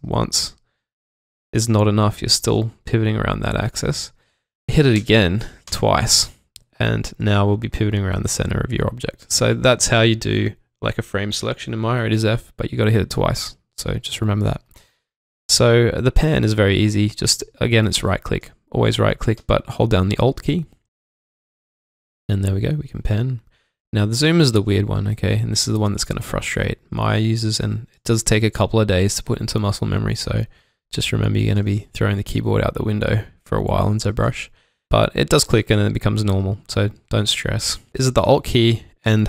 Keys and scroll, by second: 2.1 typing, 4.9-5.6 typing, 7.9 typing, 13.2 alt+Num_Lock, 19.3 alt+Num_Lock, 30.7 alt+Num_Lock.